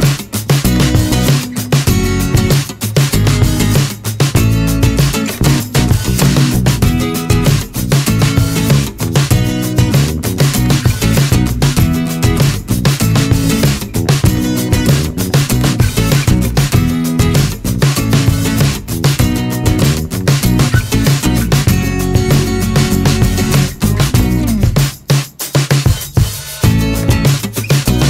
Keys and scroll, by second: 0.4 ctrl+z, 1.6 Delete, 5.0 3, 5.5 1, 8.0 ctrl+z, 8.9 ctrl+z, 21.6 2.